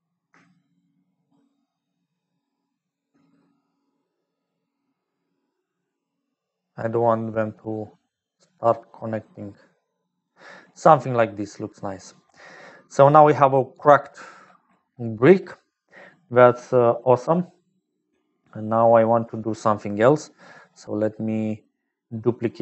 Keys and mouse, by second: 0.0-22.6 typing, 0.8-10.5 shift+drag, 12.4 click, 15.0 click, 20.9 click, 21.8 click.